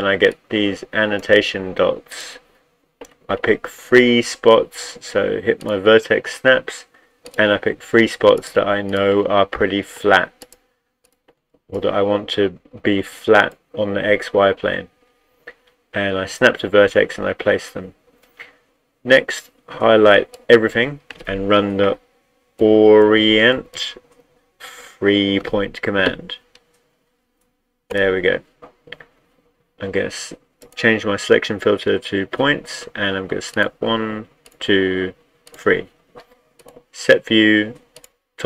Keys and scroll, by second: 22.3-24.2 typing.